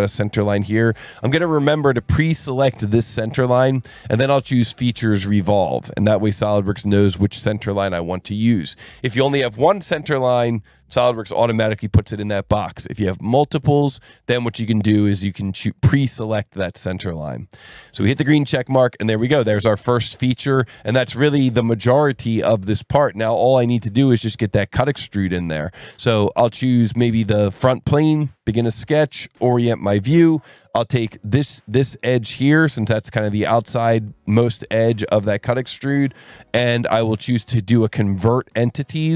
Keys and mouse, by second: 0.0 click, 0.8 click, 2.5 click, 4.4 click, 5.2 click, 17.4 click, 18.3 click, 24.7 click, 28.0 click, 28.7 click, 29.3 n, 32.3 click, 33.0 click, 34.9 click.